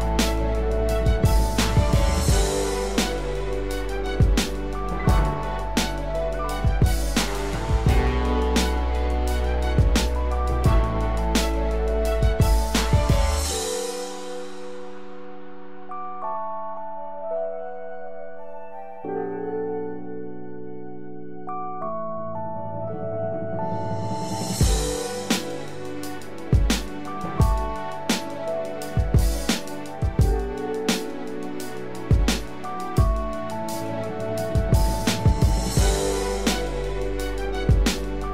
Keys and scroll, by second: 0.8 ctrl+z.